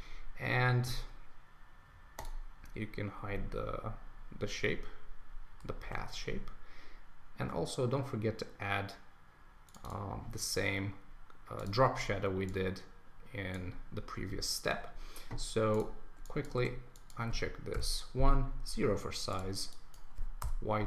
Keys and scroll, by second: 5.8 super+s, 20.4 Return.